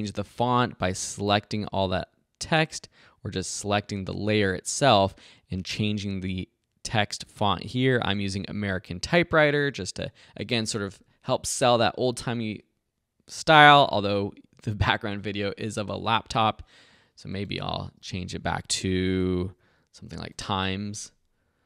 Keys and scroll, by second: 0.4 super+a, 19.8-21.1 typing.